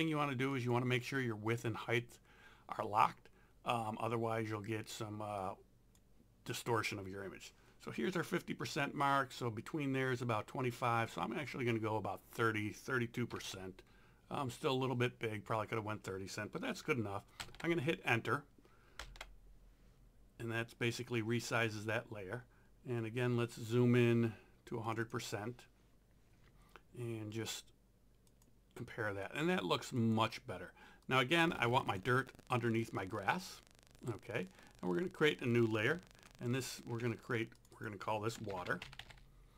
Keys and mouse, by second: 0.6 click, 5.4 click, 13.1-13.9 typing, 17.4 KP_Enter, 24.9 click, 27.4 click, 36.3 ctrl+click, 37.6 click, 38.3-39.5 typing.